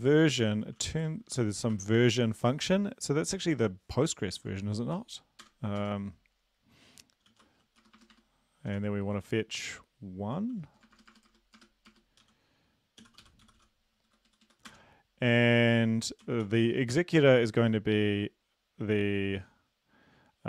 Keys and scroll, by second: 0.0-1.7 typing, 2.2 Right, 2.4 Right, 5.5 Return, 5.8 Tab, 7.2-9.2 typing, 10.5-13.5 typing, 14.1 Down, 14.3 Down, 14.5 Down, 14.7 Return, 16.2-16.9 typing.